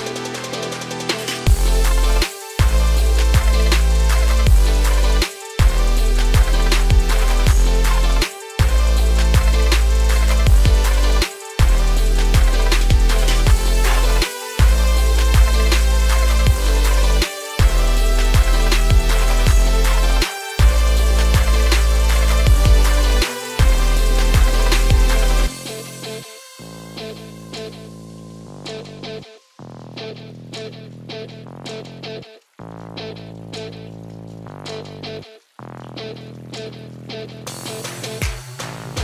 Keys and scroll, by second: 32.9 ctrl+w.